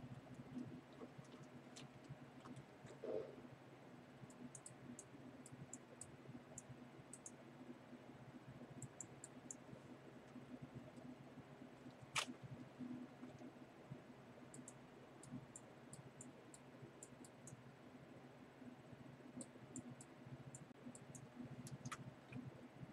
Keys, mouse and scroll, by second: 0.4 v, 2.5 ctrl+u, 4.6 click, 5.0 click, 5.8 click, 7.2 click, 7.3 click, 9.1 click, 9.6 click, 10.3 Return, 12.7 ctrl+u, 14.8 click, 15.6 click, 17.1 click, 17.5 click, 19.8 click, 20.6 click, 21.3 click, 21.9 Return, 22.6-22.9 typing.